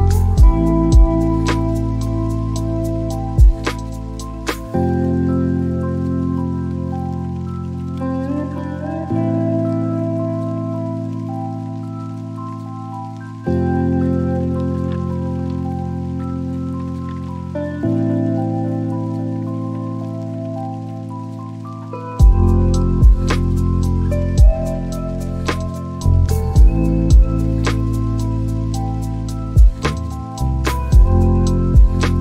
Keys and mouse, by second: 0.8 click, 5.2 click, 9.1 alt+click, 9.4 alt+click, 12.1 click, 13.8 click, 14.6 click, 19.2 shift+click, 20.7 click, 21.3-23.3 right drag, 24.9 click, 25.4 shift+a, 31.6 click.